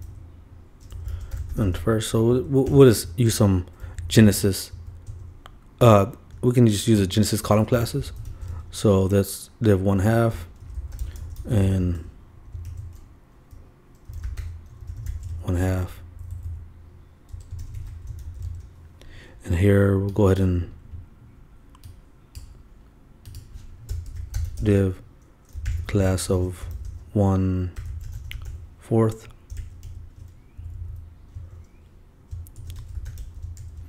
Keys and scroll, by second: 0.0-0.6 typing, 0.9 shift+Left, 1.7 shift+', 2.3 shift+Right, 3.0 shift+BackSpace, 3.3 shift+., 3.8 shift+Down, 5.8 shift+Return, 7.4-9.0 typing, 10.3 shift+Return, 10.4-11.3 typing, 12.5 shift+=, 12.7 shift+', 15.0-16.1 typing, 17.5 shift+Return, 17.6-19.0 typing, 23.8-24.7 typing, 26.3 shift+=, 26.7 shift+o, 29.5 shift+h, 29.8 shift+., 32.3 shift+Return, 32.6-33.8 typing.